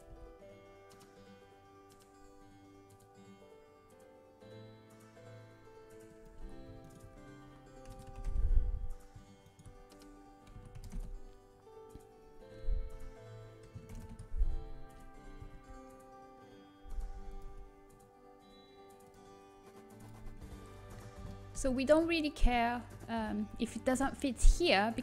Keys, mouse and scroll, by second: 1.0 r, 6.9-12.3 right drag, 9.7 s, 12.3 s, 13.8 ctrl+KP_Add, 14.7 ctrl+KP_Add, 15.3 g, 17.4 z, 20.0 z, 20.3-23.0 middle drag.